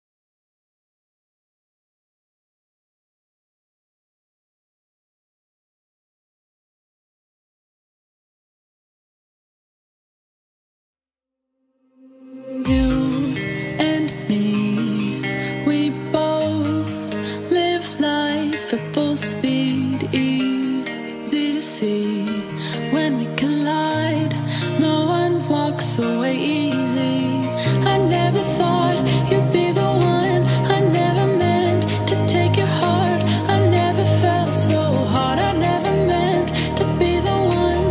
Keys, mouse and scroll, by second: 2.0-2.7 scroll up 1, 3.2 right click, 4.3 click, 5.3 shift+e, 5.7 space, 6.4 scroll down 1, 7.1-7.4 scroll down 1, 7.4 ctrl+x, 7.8 click, 12.3 ctrl+a, 12.6 right click, 13.5 click, 15.9 right click, 17.2 click, 17.8 shift+middle click, 18.2-18.5 scroll up 1, 19.6 click, 20.2-20.7 scroll down 1, 22.9 e, 23.2-30.7 drag, 33.5-33.9 scroll down 2, 33.6 space, 34.9 e, 35.1 click, 35.2 click, 35.5 scroll down 1, 36.0 shift+middle click, 36.3 scroll up 1, 36.9 click, 37.6 scroll down 1.